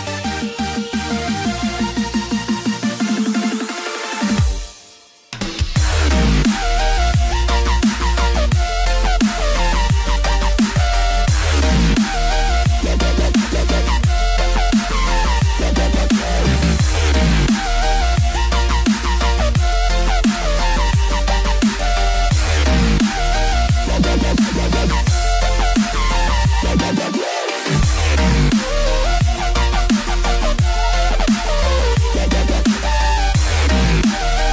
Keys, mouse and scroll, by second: 0.6 KP_3, 0.6 scroll up 1, 1.9 scroll up 1, 2.0 click, 3.8 click, 9.3 click, 15.2 click, 16.0 click, 17.2 click, 22.7 click, 23.5 click, 25.3 click, 29.0 click, 31.4 click.